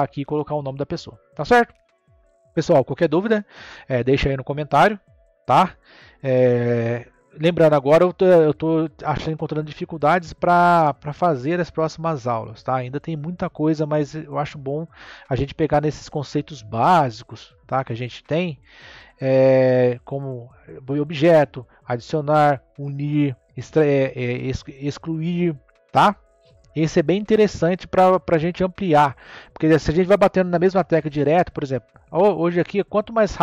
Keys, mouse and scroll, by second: 0.2-3.2 middle drag, 20.4 click, 22.7 scroll down 1, 22.9-25.9 middle drag, 32.0-32.5 scroll up 1, 32.5-33.4 scroll down 3.